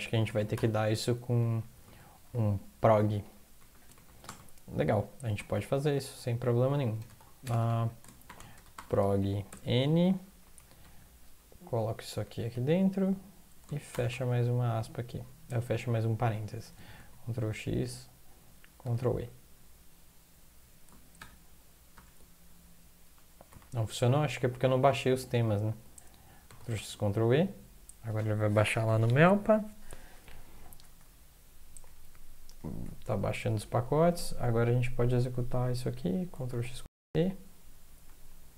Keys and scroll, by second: 0.2 ctrl+x, 0.5 0, 1.2 Up, 1.9 ctrl+Left, 2.1 ctrl+Left, 2.3 ctrl+Left, 3.6 ctrl+Left, 6.1 Right, 7.0 Return, 7.0 BackSpace, 8.2 Return, 8.5 BackSpace, 8.7 Up, 9.5 Tab, 10.2-11.3 typing, 11.5 Home, 12.1 Up, 12.5 Down, 13.9 Tab, 17.0 ctrl+x, 18.8 ctrl+e, 21.2 ctrl+\, 21.9 ctrl+\, 23.0 Down, 23.5 Up, 23.6 Up, 23.8 Up, 23.9 Up, 24.4 Up, 25.4 Down, 30.4 Down, 30.8 Down, 31.9-33.5 Down, 33.7 Down, 34.1 Up, 34.3 Up, 34.5 Up, 34.9 End, 36.8 ctrl+e.